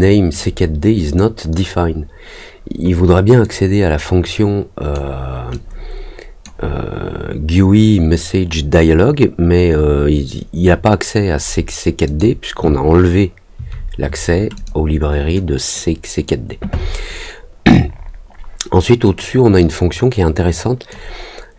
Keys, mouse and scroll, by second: 0.3 click, 3.4-4.9 drag, 5.5 click, 12.0 click, 14.5 click, 15.7 click, 19.1-20.8 drag.